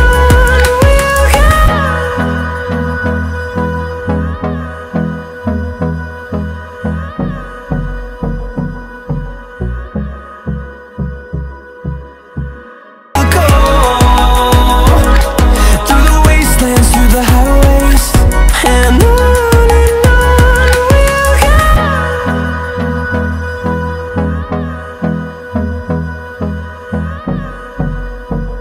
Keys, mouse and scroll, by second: 10.5-11.2 drag, 16.5 F11.